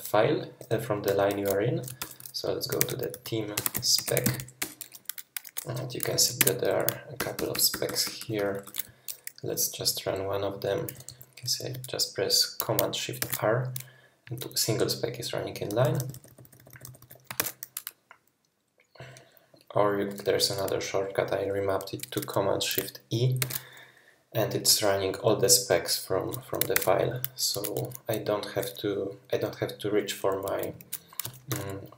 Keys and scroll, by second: 0.0-1.1 typing, 2.0 super+p, 2.4-4.9 typing, 6.1 Escape, 6.4 Escape, 6.9-10.9 typing, 13.2 shift+super+r, 15.7-17.0 typing, 17.4 shift+super+r, 23.4 shift+super+e, 26.7 shift+super+e, 31.5 shift+super+y.